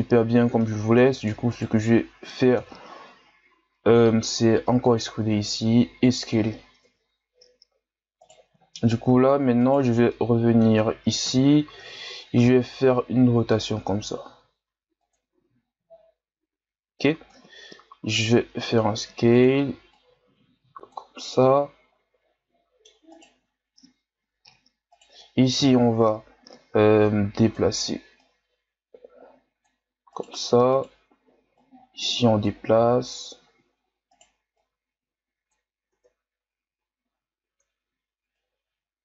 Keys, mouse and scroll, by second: 0.6 middle click, 1.5 right click, 2.6 KP_3, 3.9 e, 6.8 KP_1, 8.2 right click, 9.6 right click, 10.0 scroll up 1, 10.1-11.2 middle drag, 11.2 KP_1, 12.4 r, 15.3 Tab, 15.7-16.7 scroll down 5, 16.7-17.3 scroll up 3, 17.3 Tab, 17.6-18.1 scroll up 1, 18.1 s, 19.9-21.3 drag, 21.3-23.1 middle drag, 23.1 right click, 24.9 shift+right click, 25.6 KP_1, 26.8-30.1 drag, 30.1 right click, 30.7 right click, 31.6-32.7 drag, 32.7 r, 34.6-35.9 drag, 35.9 Tab, 36.4-36.8 scroll down 5, 37.0-37.5 scroll up 4, 37.5 Tab, 38.3-39.0 drag.